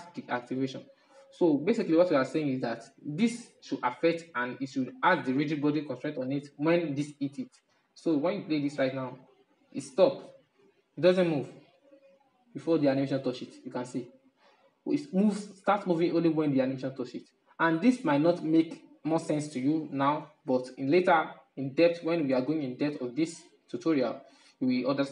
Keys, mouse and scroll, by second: 7.1-9.6 drag, 9.6-11.0 middle drag, 11.0 Right, 11.3 Right, 11.5 Right, 11.7-12.2 Right, 12.3 Right, 12.5 Right, 15.3 Left, 15.5 Left, 15.7 Left, 15.8 Left, 16.4 Right, 16.6 Right, 16.8 Right, 17.1 Right, 17.3 Right, 17.5-18.2 Right, 18.4 Right, 19.1-20.2 Left, 21.1-24.1 middle drag.